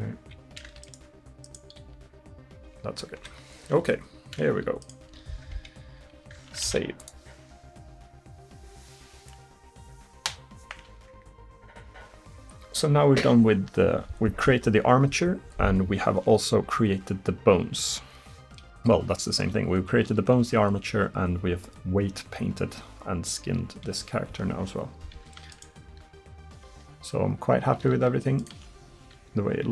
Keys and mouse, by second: 1.8 r, 4.9-6.7 drag, 5.1 r, 6.7 ctrl+s, 25.6-29.7 drag, 25.9 r, 28.6 r.